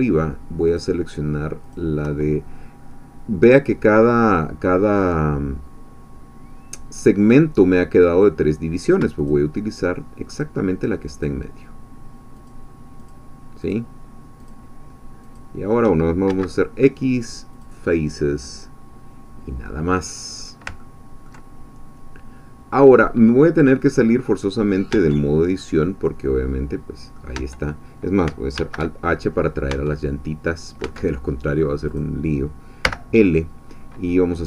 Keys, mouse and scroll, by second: 1.7 shift+click, 9.2 shift+click, 10.4-11.4 shift+drag, 12.5 shift+click, 13.7 shift+click, 15.4 shift+click, 16.3 shift+x, 17.5 click, 19.1-19.4 scroll down 1, 19.7-20.7 middle drag, 20.8 ctrl+click, 22.6-24.9 scroll down 2, 24.9 Tab, 25.6-27.3 drag, 27.4 Tab, 28.5 alt+h, 29.7 Tab, 29.8-30.3 scroll down 1, 30.3 scroll down 1, 30.5 middle click, 30.9 Tab, 31.4-31.8 scroll down 1, 32.0 click, 32.8 l.